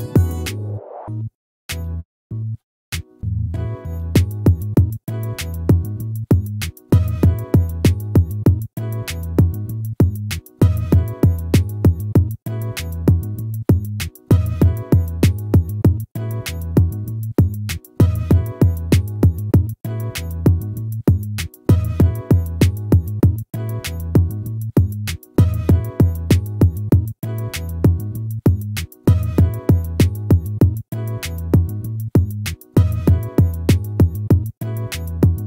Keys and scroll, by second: 2.8 ctrl+-, 4.9 ctrl++.